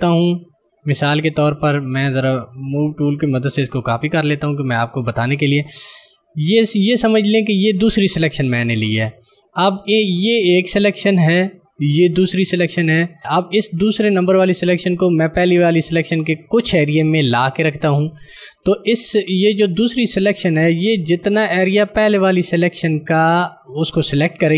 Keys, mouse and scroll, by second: 3.2 v, 4.0 alt+click, 13.2 click.